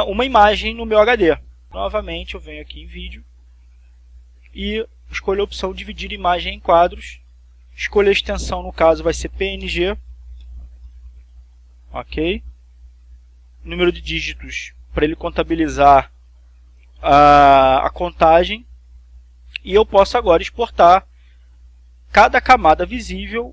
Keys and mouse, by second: 3.2 click, 7.4 click, 8.3 click, 9.0-10.0 drag, 10.2-11.9 typing.